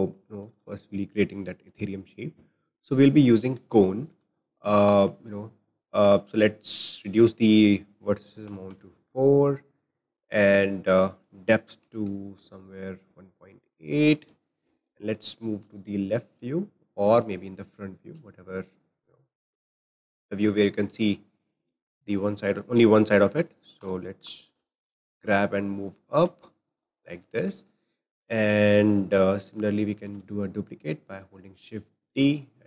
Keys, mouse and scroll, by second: 0.6 shift+a, 4.4-5.9 shift+middle drag, 5.9-13.5 drag, 13.5-14.3 middle drag, 14.3 `, 17.3 `, 18.6 click, 20.1 scroll up 3, 20.6-23.7 shift+middle drag, 23.8 g, 26.6-27.0 scroll down 2, 27.0-30.0 shift+middle drag, 30.1 shift+d.